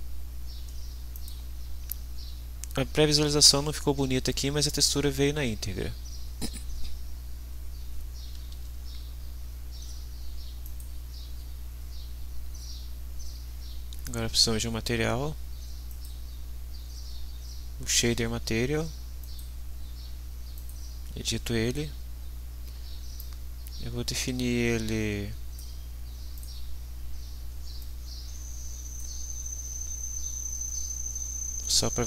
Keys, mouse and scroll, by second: 1.1 click, 8.5 ctrl+s, 10.7 click, 14.1 click, 15.9 click, 19.2 click, 20.5 click, 23.2-25.7 drag, 26.4 click, 27.8-29.2 drag, 30.1 scroll up 1.